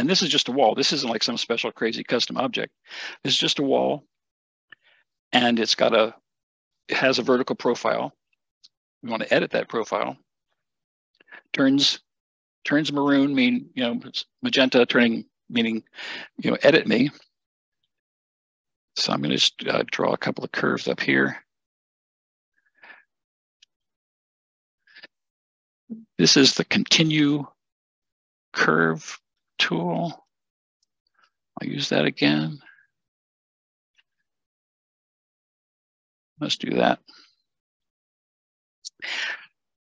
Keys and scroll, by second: 37.6 Escape, 37.6 Escape.